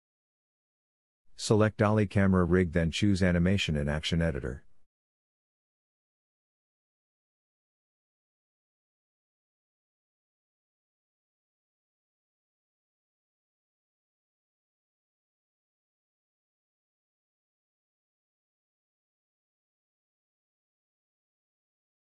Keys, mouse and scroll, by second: 0.1-1.4 drag, 4.4-9.3 drag, 9.5 space, 10.9-16.4 drag, 17.2-18.7 middle drag, 18.7-22.1 drag, 22.0 a.